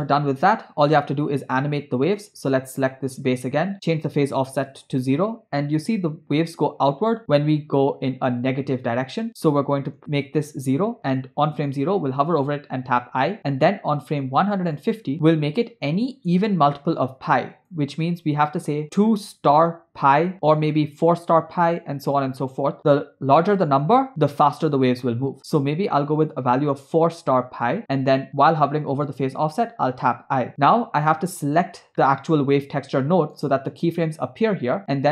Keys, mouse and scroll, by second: 1.2 click, 3.7-4.9 drag, 7.1-10.4 drag, 12.9 i, 14.3 click, 17.6-27.8 drag, 21.0 Left, 21.1 Left, 30.2 i, 31.1 click, 31.9 middle click, 33.1 middle click.